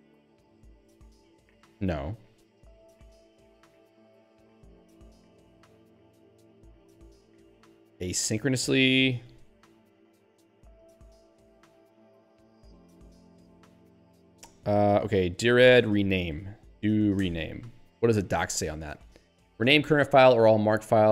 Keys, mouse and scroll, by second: 0.0-1.6 typing, 3.1 ctrl+g, 3.6-5.9 typing, 6.4 Down, 7.2 Up, 8.6 Down, 9.4 Up, 11.6 ctrl+g, 15.3-16.9 typing, 17.8 Return, 18.4 Down, 19.8 ctrl+n.